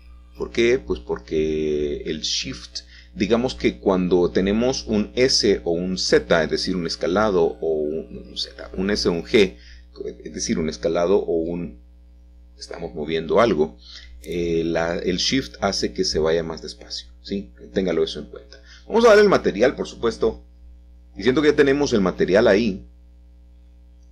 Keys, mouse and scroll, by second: 1.2-2.1 scroll down 2, 5.8-6.9 scroll up 1, 8.0 Tab, 8.7 middle click, 10.8 ctrl+click, 11.3-12.4 scroll down 2, 19.0-20.1 middle drag, 20.2 shift+middle click, 23.0-24.1 middle drag.